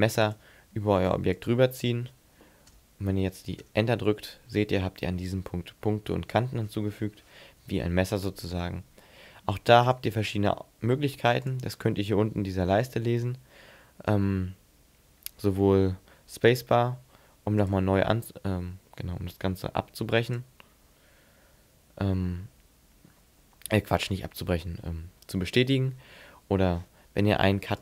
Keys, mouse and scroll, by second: 7.6 ctrl+z, 9.8 click, 17.6 click, 20.3 click.